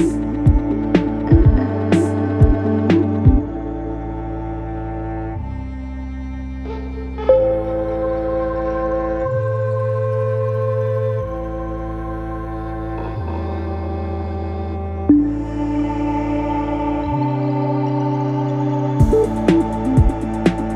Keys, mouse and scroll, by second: 2.7 double click, 5.8 space, 11.0 Return, 12.1 Return, 18.1 ctrl+a.